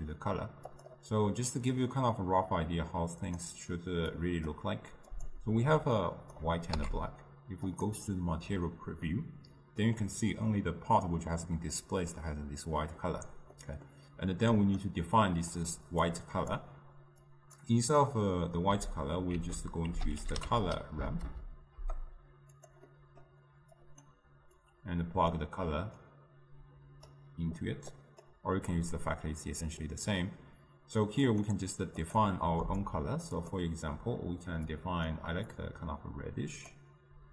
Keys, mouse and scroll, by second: 4.2 click, 6.1 click, 8.3 z, 9.1-14.5 middle drag, 14.5-21.9 drag, 21.9 ctrl+a, 23.8-27.3 drag, 28.1-33.6 drag.